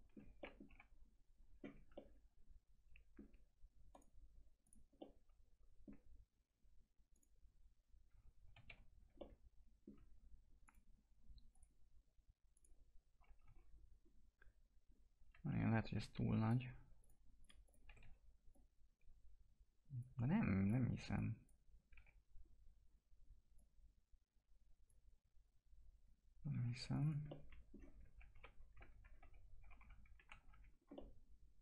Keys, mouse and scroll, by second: 0.6 F4, 1.9-3.9 alt+middle drag, 3.9 right click, 4.6 click, 4.9 middle click, 7.1 click, 8.4-9.1 typing, 9.1-10.6 alt+middle drag, 10.6 click, 13.2 alt+x, 13.5 scroll up 1, 15.3 alt+x, 16.3 click, 17.8 e, 18.5-20.6 drag, 21.9 w, 23.5-26.6 drag, 26.6 2, 26.9 click, 27.3 alt+middle click, 28.3 ctrl+BackSpace, 29.0 scroll down 1, 29.6 F3, 29.8 F4, 30.3 alt+x, 30.6 scroll down 1, 30.9-31.6 alt+middle drag.